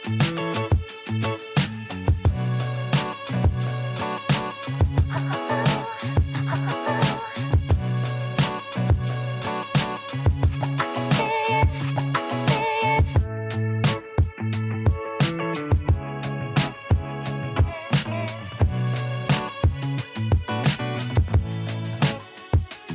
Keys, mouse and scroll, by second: 1.6 ctrl+r, 8.6 click, 10.5 s, 15.5 ctrl+r, 17.9 s, 22.3-22.9 shift+middle drag.